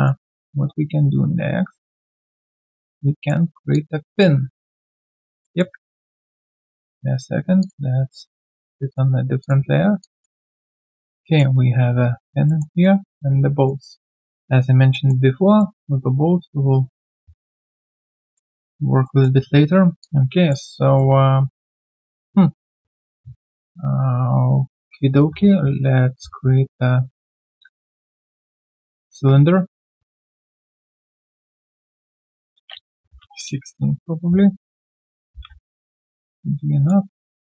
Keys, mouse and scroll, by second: 0.2 alt+click, 2.5 alt+click, 3.7 alt+click, 5.4 alt+middle click, 5.7-6.0 alt+scroll down 2, 10.0 alt+click, 10.9 alt+middle click, 11.2 alt+click, 12.4 alt+middle click, 12.7 alt+right click, 13.5 alt+right click, 14.2 alt+middle click, 14.5 alt+right click, 14.9 alt+middle click, 15.2 alt+right click, 15.6 alt+middle click, 18.1 alt+middle click, 18.4 alt+middle click, 18.6 alt+right click, 19.0 alt+middle click, 20.0 alt+click, 20.9 alt+middle click, 25.4 shift+right click, 27.7 shift+right click, 32.7-33.5 typing, 34.7 alt+click, 35.0-35.9 typing, 35.1 alt+middle click.